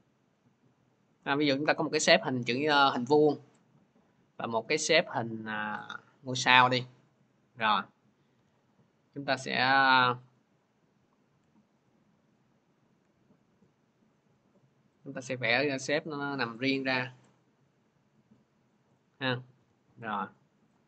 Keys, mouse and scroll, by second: 1.6 click, 4.0-8.2 drag, 8.2 v, 12.8 ctrl+z, 14.9 click, 16.5 click, 19.4 v, 20.6 click.